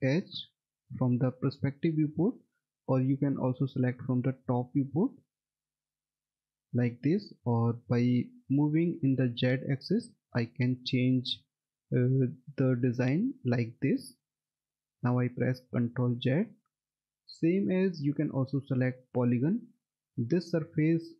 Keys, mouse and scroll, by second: 0.3 F3, 1.5 alt+middle click, 4.7 click, 5.6 alt+middle click, 8.0 click, 10.3 F3, 11.7 alt+middle click, 15.8 ctrl+z, 18.8 click, 20.9-21.1 scroll down 1.